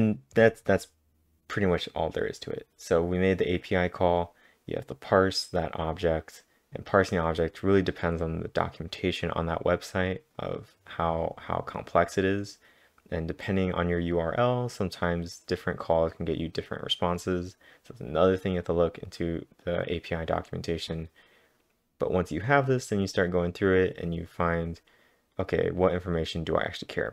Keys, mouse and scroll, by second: 7.4-8.1 typing, 7.6 click, 9.7-10.4 typing, 13.4 click, 13.8-14.6 typing, 14.1 click, 15.0-17.4 click, 17.1-17.9 typing, 24.4 click, 24.4 click.